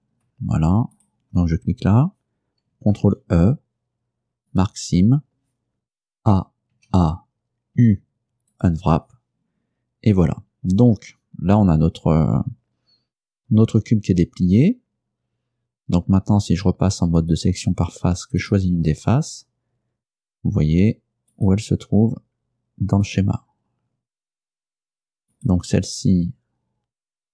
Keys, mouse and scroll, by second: 1.0 shift+right click, 3.0 ctrl+e, 4.6 click, 6.3 a, 7.9 u, 8.6 click, 17.3 click, 18.5 right click, 21.4 right click, 23.1 right click, 25.4 right click.